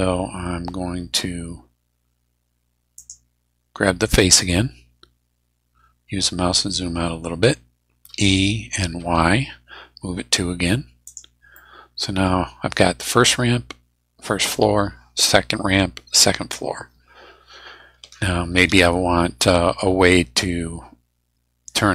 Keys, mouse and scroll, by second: 2.9 click, 4.0 right click, 5.4 scroll down 1, 8.1 e, 9.1 y, 11.1 click, 11.5 middle click, 17.3-17.7 scroll down 2, 19.3 scroll up 2.